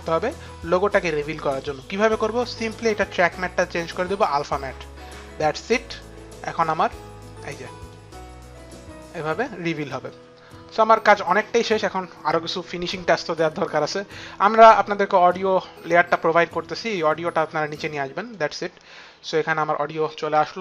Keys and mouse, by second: 0.6 click, 2.6 click, 3.9 click, 5.6 click, 6.8 click, 8.3 click, 9.3 click, 12.9 click, 14.0 click, 16.6 click.